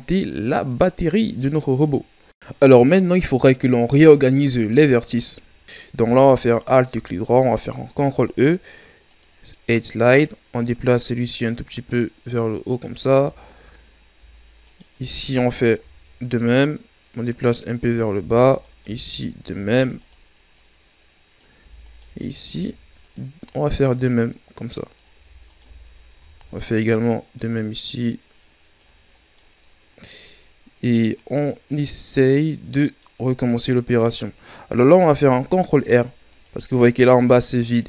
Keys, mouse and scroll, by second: 1.4-2.4 middle drag, 2.0-3.6 scroll up 2, 3.6-5.3 middle drag, 5.3-6.6 right drag, 7.9 ctrl+e, 14.7-15.8 alt+right drag, 15.8 ctrl+e, 18.6 alt+right click, 19.5 ctrl+e, 21.8 alt+right click, 22.5 ctrl+e, 25.5 alt+right click, 26.2 ctrl+e, 29.2 scroll down 1, 29.4-32.4 middle drag, 35.0 ctrl+r.